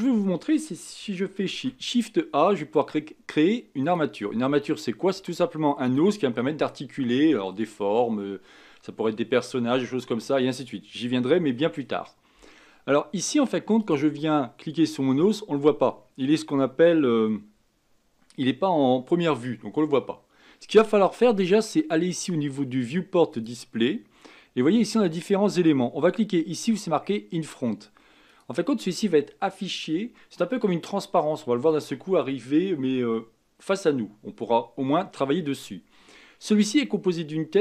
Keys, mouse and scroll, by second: 1.5 shift+a, 13.8 click, 23.3-26.3 drag, 28.3 click.